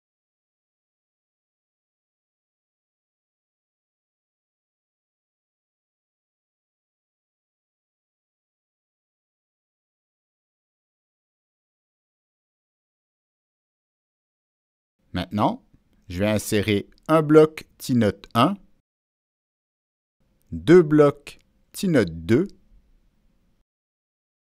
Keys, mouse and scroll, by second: 2.5 click, 3.7-5.0 drag, 6.2 click, 8.5 click, 17.5 click, 21.0 click, 22.1 Escape, 22.1 click, 22.6 Escape, 22.6 click.